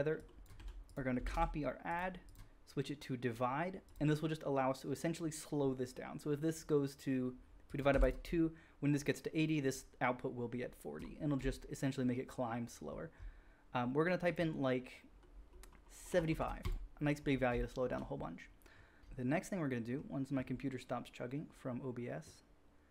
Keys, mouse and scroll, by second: 0.5 g, 0.8 shift+a, 1.2-8.0 drag, 1.2 shift+d, 8.0 middle click, 14.6-16.6 drag, 19.0-19.5 shift+middle drag.